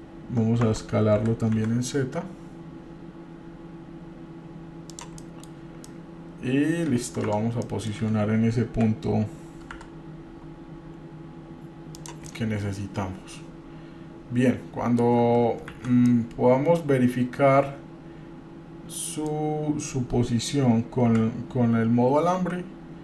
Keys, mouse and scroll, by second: 1.0 Tab, 1.4 s, 5.4 middle click, 5.8 scroll up 1, 6.0-7.2 middle drag, 7.5 Tab, 7.8 middle click, 8.9 g, 12.5-15.6 middle drag, 15.9 shift+z, 16.3-19.5 middle drag, 21.3 g.